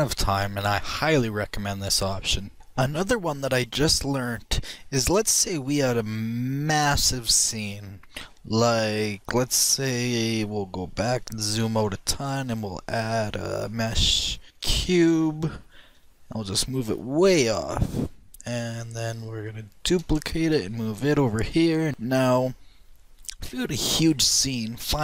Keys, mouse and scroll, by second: 5.5-9.1 drag, 5.7-7.3 middle drag, 9.1-10.7 middle drag, 10.9 KP_1, 11.4-14.3 middle drag, 13.8 shift+a, 16.8 g, 20.9 shift+d, 22.9-23.6 drag, 24.7-25.0 middle drag.